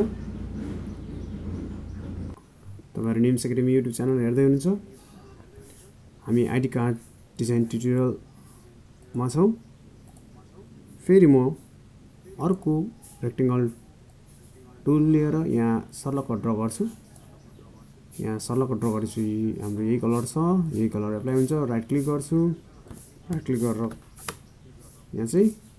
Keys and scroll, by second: 25.2 ctrl+j.